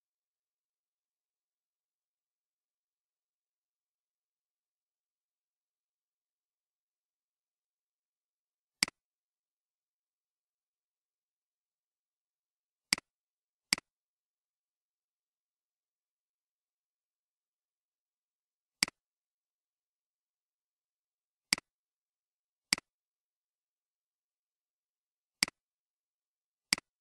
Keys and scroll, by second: 20.6 ctrl+c, 23.4 ctrl+v.